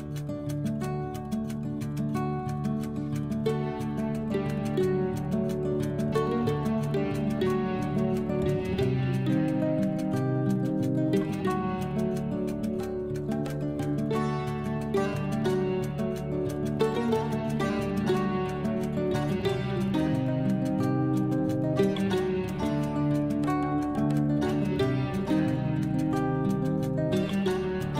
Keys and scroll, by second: 1.6 ctrl+g, 15.3 b, 16.9 Left, 18.2 Right, 20.7 F12, 21.7 2, 26.5 F12, 27.5 1, 27.8 Return.